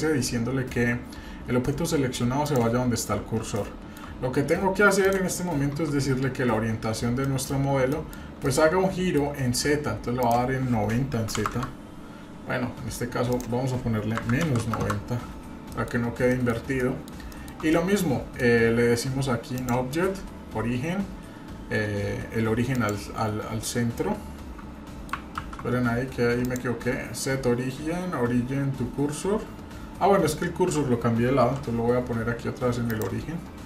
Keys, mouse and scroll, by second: 3.1-3.5 scroll up 2, 3.5 shift+middle click, 5.0 click, 7.2 middle click, 7.5 scroll down 1, 7.9 middle click, 8.1-8.4 scroll down 2, 8.4 middle click, 9.4-10.2 scroll up 1, 10.2-12.1 drag, 10.2-11.3 scroll up 1, 13.3-15.3 drag, 15.7 middle click, 15.9-16.3 scroll up 2, 16.3 middle click, 16.5 scroll down 1, 16.8 middle click, 17.3 shift+middle drag, 17.7-18.4 middle drag, 19.5-23.0 drag, 23.7 scroll down 2, 23.9-25.1 middle drag, 25.4 ctrl+z, 26.4-30.1 drag, 31.4 shift+s.